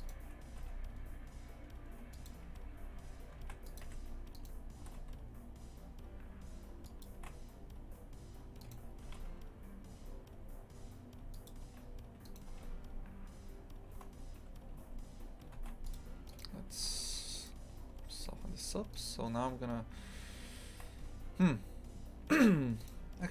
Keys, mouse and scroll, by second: 0.0 right click, 0.5 g, 3.4 ctrl+r, 4.3 right click, 4.8 g, 8.6 right click, 9.0 g, 12.2 right click, 12.5 g, 16.3 right click, 16.8 g, 18.1 2, 18.6 right click, 18.9 shift+right click, 21.0 a, 22.8 right click.